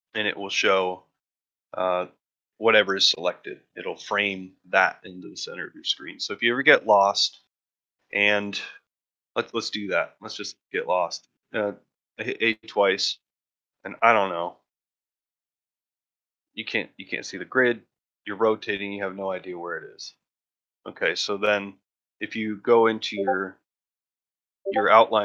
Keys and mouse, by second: 0.4-1.8 middle drag, 6.4 middle drag, 6.9-7.4 shift+middle drag, 10.4 a, 12.8 ctrl+middle drag, 13.4 shift+middle click, 13.7 shift+middle click, 14.0 ctrl+middle drag, 14.3 ctrl+middle click, 14.6 shift+middle click, 15.0 shift+middle click, 15.3 shift+middle click, 15.7 shift+middle click, 16.2 ctrl+middle drag, 16.5 shift+middle click, 16.9 shift+middle drag, 17.5 ctrl+middle click, 17.8-18.1 middle drag, 18.3-18.6 middle drag.